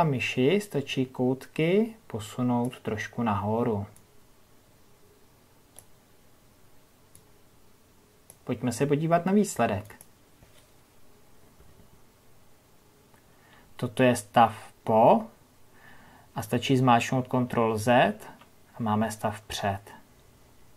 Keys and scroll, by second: 20.1 ctrl+z.